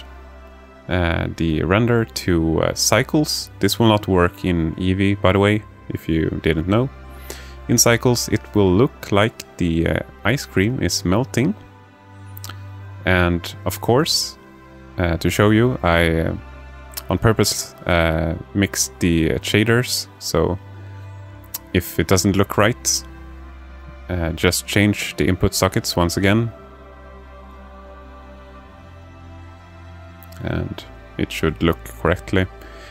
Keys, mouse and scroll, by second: 1.1 click, 17.1-18.1 drag, 22.0 click, 23.2-24.4 alt+shift+middle drag, 25.9-28.8 drag.